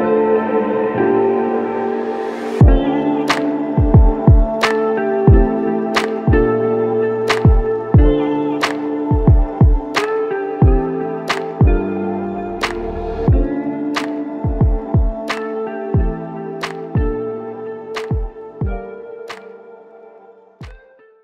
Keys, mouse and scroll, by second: 1.4 double click, 2.3 shift+click, 11.0 alt+click, 11.3 f, 13.3 double click, 13.3 double click, 15.4 shift+click, 17.0 ctrl+z, 17.6 ctrl+z, 18.6 alt+click.